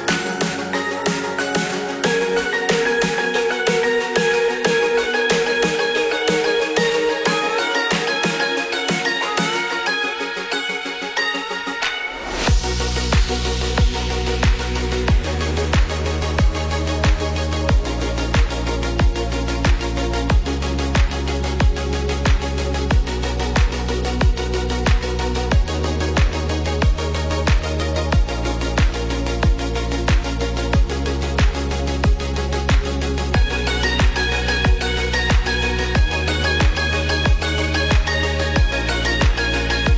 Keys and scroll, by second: 3.3 ctrl+z, 27.2 ctrl+z.